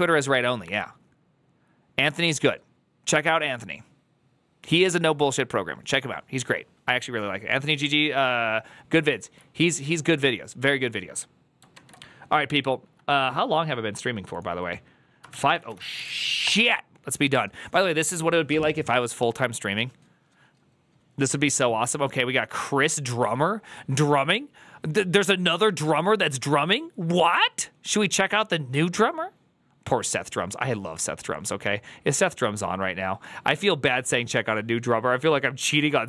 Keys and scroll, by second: 11.6 alt++, 11.6 alt+[, 15.5-16.3 typing.